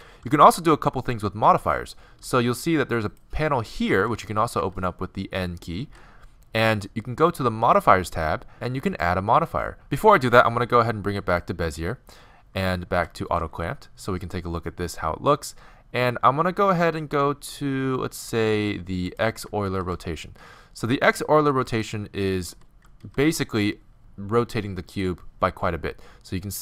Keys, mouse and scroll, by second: 3.1-5.2 drag, 4.6 n, 5.9 n, 7.8-9.9 drag, 9.9 t, 10.8 t, 12.9 v, 19.1-21.2 drag, 19.7 shift+h, 21.7-23.5 drag, 22.5 g, 26.0-26.5 middle drag.